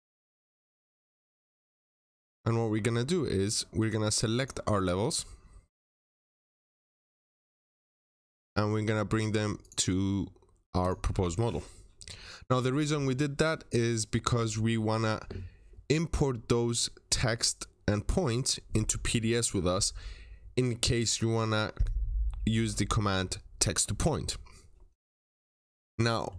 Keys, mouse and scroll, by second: 1.0 double click, 2.3 scroll up 1, 3.7 click, 4.0 scroll up 1, 4.2 click, 4.6 right click, 6.0 click, 6.4 right click, 6.9 click, 7.4 double click, 9.0 right click, 9.5 click, 26.0 middle click.